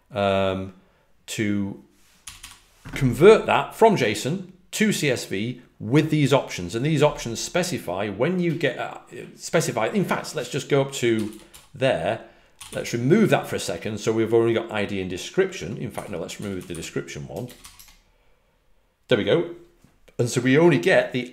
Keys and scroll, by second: 2.1 typing, 10.8-12.6 typing, 15.6-17.7 typing.